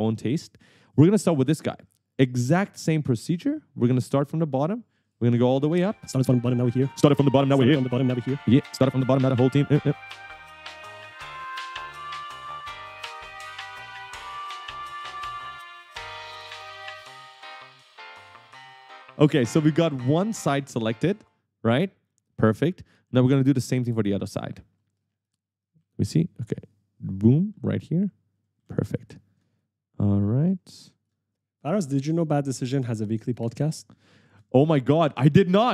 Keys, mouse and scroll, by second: 0.4 right click, 0.6 a, 0.9 w, 1.8 right click, 1.9 w, 3.5 shift+click, 5.6 shift+click, 6.2 right click, 6.5 shift+click, 6.9-9.6 typing, 8.3 shift+click, 9.1 right click, 9.4 shift+click, 10.4 shift+click, 10.9 right click, 11.3 shift+click, 12.0 right click, 12.0 w, 12.5 shift+click, 13.4 shift+click, 13.9 right click, 14.6 w, 14.9 shift+click, 15.6 right click, 16.0 shift+click, 16.4 right click, 17.1 shift+click, 18.3 right click, 18.9 right click, 20.4-21.9 typing, 25.9 s, 27.4-29.0 typing, 29.7 shift+click, 30.8 right click, 30.9 w, 31.5 shift+click, 32.8 shift+click, 33.3-34.8 typing, 33.5 right click, 34.8 shift+click.